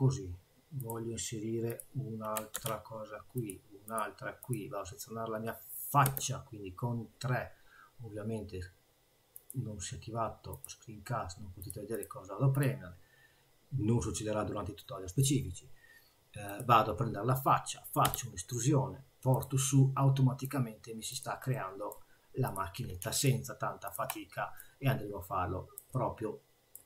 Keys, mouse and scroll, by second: 11.6 click, 11.9 click, 12.5 click, 16.5 click, 18.0 e, 19.5 e, 19.6 middle click, 21.1 click, 21.5 middle click, 22.5 click, 23.1 shift+click, 23.8 click, 24.6 click, 25.9 middle click.